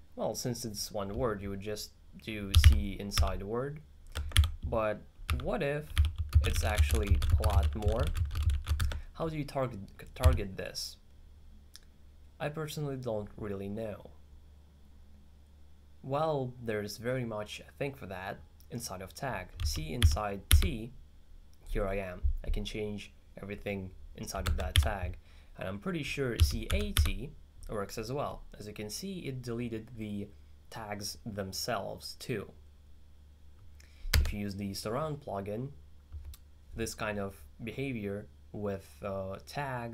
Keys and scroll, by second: 2.3-3.7 typing, 5.3-9.2 typing, 10.3 h, 19.4-21.0 typing, 26.2-27.5 typing.